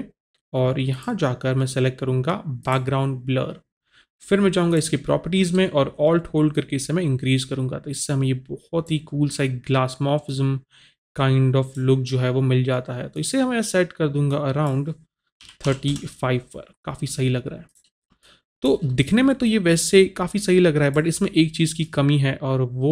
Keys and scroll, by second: 15.6 KP_3, 15.6 KP_5, 15.9 Return.